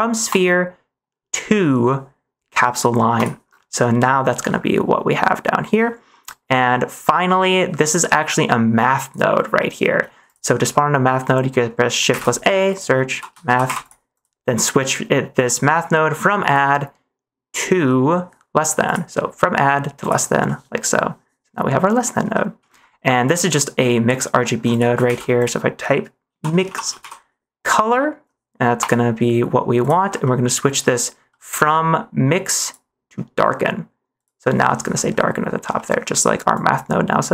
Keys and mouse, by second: 0.3-3.2 drag, 4.5 middle drag, 5.8 middle click, 6.7 middle click, 8.0 click, 8.2 click, 9.6 middle click, 10.2 click, 10.6 middle click, 12.0 shift+a, 16.5 click, 18.9-20.1 drag, 20.5 middle click, 22.4 middle click, 24.6 click, 25.0 shift+a, 30.3 middle click, 31.2 middle click, 32.6-34.2 drag, 34.7 middle click, 35.8 middle click, 36.5-37.3 drag.